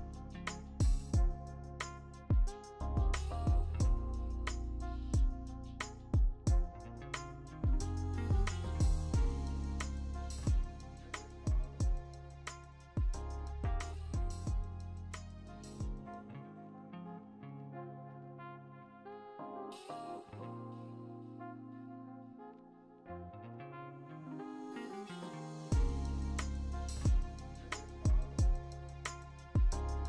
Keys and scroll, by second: 3.3-4.0 typing, 5.0 ctrl+d, 5.9 b, 7.5 ctrl+z, 7.8 w, 8.4 b, 11.4 ctrl+d, 12.2-13.0 scroll, 13.8 w, 16.0 ctrl+d, 16.6 ctrl+d, 16.8 w, 19.3 Delete, 19.6 ctrl+d, 21.1 v, 21.8 v, 25.3 ctrl+alt+g.